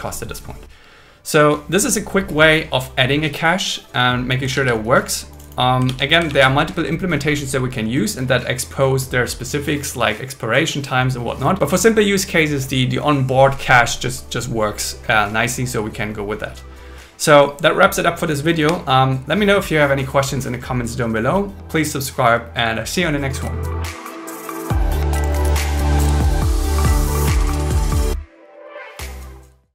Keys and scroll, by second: 4.5 super+1, 5.8 super+1, 6.3 super+1.